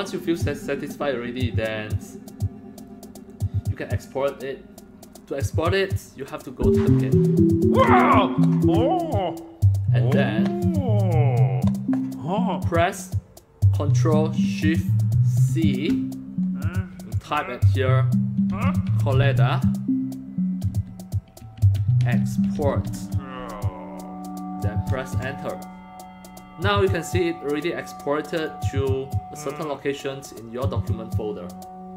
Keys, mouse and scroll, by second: 6.4 click, 15.5 ctrl+shift+c, 17.2 click, 18.3-19.4 typing, 20.7-23.3 typing, 25.1 Return, 28.0 click.